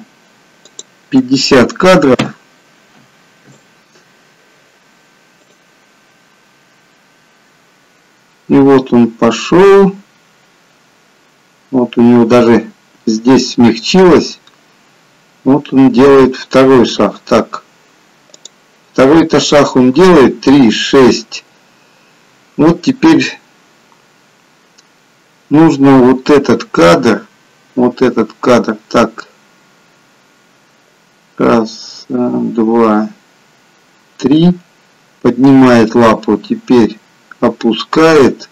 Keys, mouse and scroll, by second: 0.7 click, 5.5 click, 18.7 click, 19.7 click.